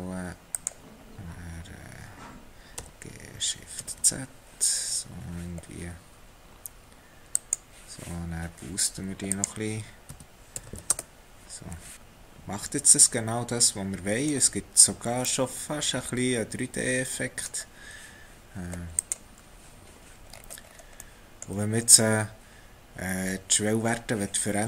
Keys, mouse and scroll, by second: 2.7 g, 9.3 click, 10.6 0, 11.9 middle click, 14.8-15.3 scroll up 1, 15.3 middle click, 19.0 click, 20.4-20.8 scroll down 7, 21.0 middle click.